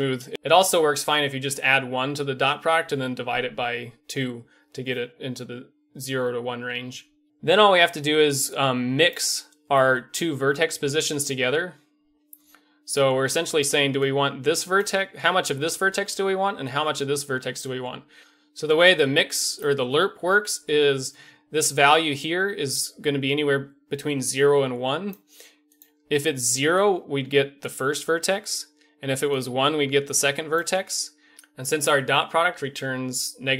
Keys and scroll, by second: 13.7-16.2 d, 16.5-17.9 d, 26.5-31.9 d.